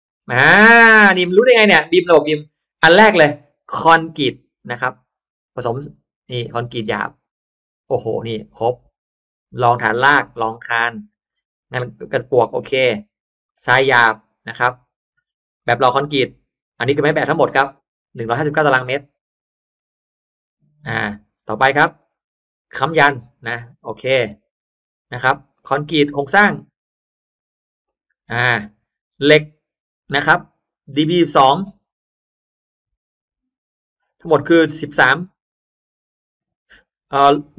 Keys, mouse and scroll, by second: 0.2 scroll down 1, 0.9 click, 1.3-2.1 scroll up 2, 1.8 middle click, 3.2 middle click, 6.6 click, 11.2 click, 13.4 click, 15.5 click, 21.9 click, 25.4 click, 31.1 click.